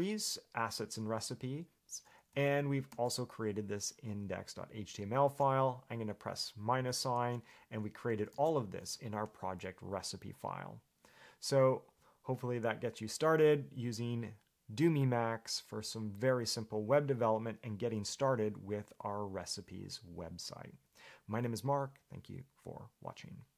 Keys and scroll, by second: 1.0 Escape, 2.5 j, 3.1 shift+v, 5.4 Escape, 7.0 -, 8.5 shift+v.